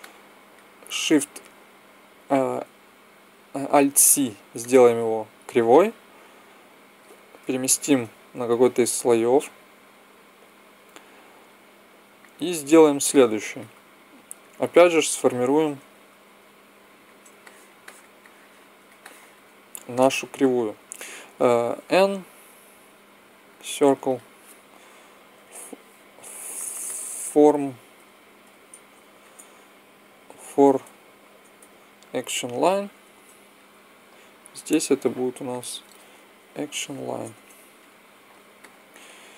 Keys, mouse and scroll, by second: 3.7 alt+c, 9.3 m, 12.0 click, 13.0-16.2 middle drag, 16.2-17.3 drag, 17.3-18.7 middle drag, 21.7 n, 23.9-25.7 drag, 26.5 BackSpace, 26.7 BackSpace, 34.3-35.3 right drag, 35.3 middle click, 36.3 right click, 37.0 click.